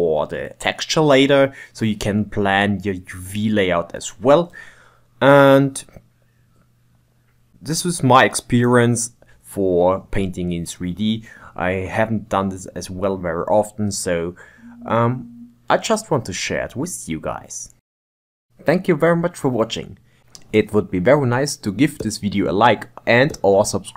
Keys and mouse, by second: 0.3 ctrl+middle click, 1.1 KP_1, 1.3 shift+middle click, 1.5 shift+right click, 1.7 shift+middle click, 2.3 click, 3.3 shift+middle click, 3.6 click, 4.0 click, 4.4 shift+middle click, 4.9 click, 5.9 click, 6.2 click, 6.6 click, 6.8-8.0 ctrl+middle drag, 6.8 click, 8.2 click, 8.6 shift+right click, 8.8 ctrl+shift+middle click, 9.1-10.2 drag, 10.2 shift+right click, 10.9 click, 11.3 middle click, 11.3 Tab, 11.7 g, 11.9 click, 12.1 g, 12.5 ctrl+Tab, 12.5 ctrl+middle click, 13.0 click, 13.1 click, 13.3 click, 13.5 middle click, 13.5 shift+click, 13.9 shift+d, 14.0 g, 14.5 middle click, 14.7 ctrl+Tab, 15.1-16.7 middle drag, 18.1-19.7 middle drag, 20.3 middle click, 22.4-23.4 drag, 23.4 middle click.